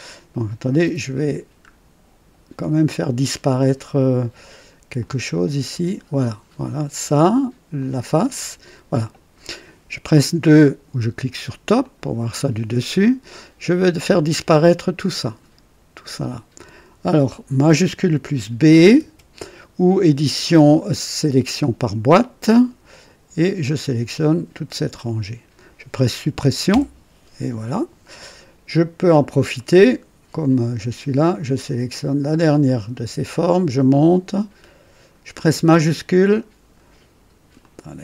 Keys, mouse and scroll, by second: 1.2-1.6 scroll down 3, 3.3 scroll up 2, 4.9 click, 5.6 space, 5.7 space, 7.7 click, 8.1 space, 11.7 click, 12.7-13.5 right drag, 19.1 shift+b, 22.3-25.2 drag, 26.6 Delete, 29.5 click, 31.2 click, 32.6-35.5 drag, 37.5 click.